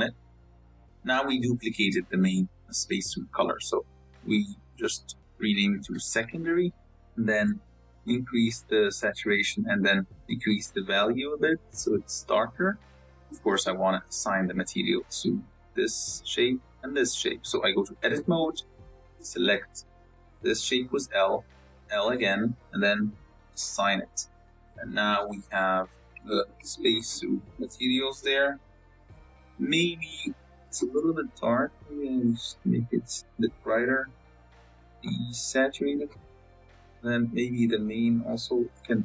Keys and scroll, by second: 18.3 Tab, 18.7 a, 20.5 l, 21.4 l, 23.7 Tab, 24.5 z.